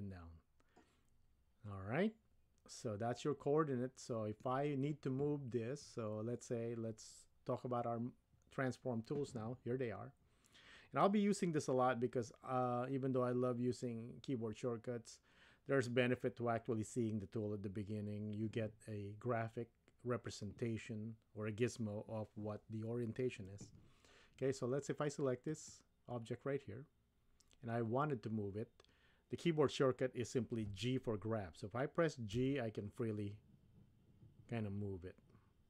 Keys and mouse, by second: 25.4 click, 32.3 g.